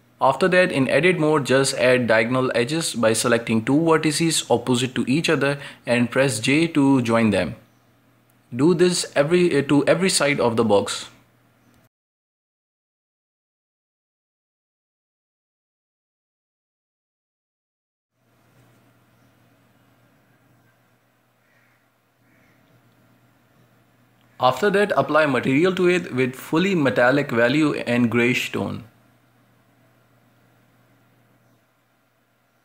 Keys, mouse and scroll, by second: 0.7 click, 1.3 middle click, 2.1-3.1 right drag, 3.5 j, 4.2 middle click, 5.1 right click, 5.9 shift+right click, 6.2 j, 6.8 middle click, 7.6-9.4 right drag, 9.4 j, 9.9 middle click, 10.9 right click, 11.6 shift+right click, 11.9 j, 12.4 middle click, 13.4 right click, 14.0 j, 14.6-16.4 middle drag, 16.4 right click, 16.9 shift+right click, 17.3 j, 17.8-19.0 middle drag, 19.0 Tab, 20.0-23.0 middle drag, 24.3 scroll down 1, 24.6-25.0 shift+middle drag, 25.0-25.4 scroll up 2, 25.4-26.8 shift+middle drag, 26.8 click, 27.9 click, 28.5-28.8 scroll down 3, 29.1 click, 31.0-32.1 scroll down 2, 32.1-32.6 drag.